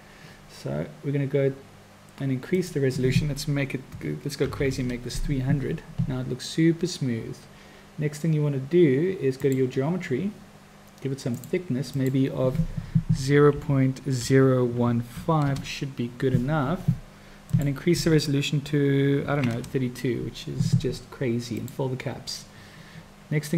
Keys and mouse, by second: 2.7-5.9 drag, 4.5 0, 9.4 click, 11.4 click, 12.1-17.1 drag, 17.5-20.7 drag, 21.5 drag.